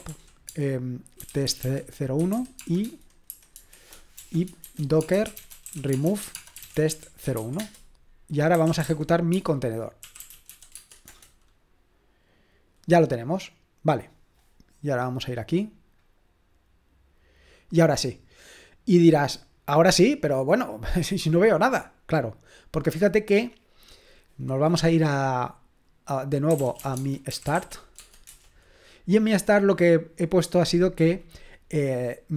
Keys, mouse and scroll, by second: 0.0-11.6 typing, 15.2-26.5 drag, 26.2-28.1 typing, 28.3 Return.